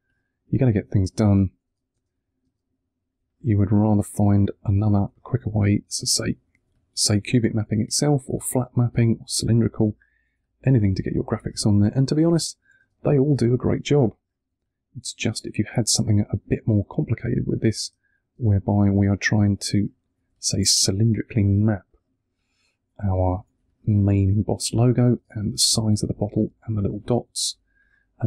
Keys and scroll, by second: 1.8 space, 3.0 1, 4.3 2, 4.9 1, 8.3 space, 9.7 1, 12.7 space, 13.9 1, 17.7 space, 19.3 1, 20.1 2, 20.6 1, 25.0 space, 26.4 1.